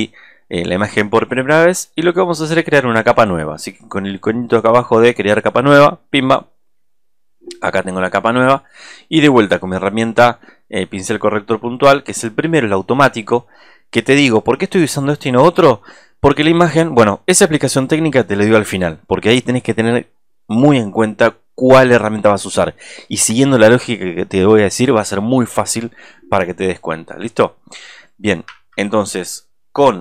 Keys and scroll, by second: 28.5 super+=.